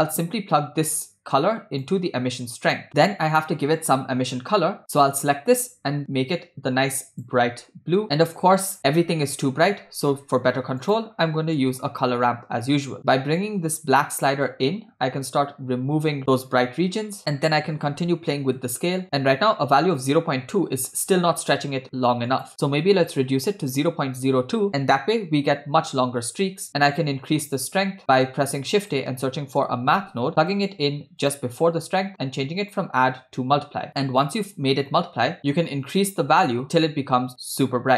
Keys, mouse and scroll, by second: 1.4-1.9 drag, 2.4 click, 4.9 click, 10.4 shift+a, 13.4-17.2 drag, 17.2 middle click, 17.4-18.5 scroll up 5, 18.6 click, 22.3-23.9 drag, 26.7 middle click, 28.1 scroll down 1, 28.5 shift+a, 32.6-34.6 drag, 35.4-37.7 drag.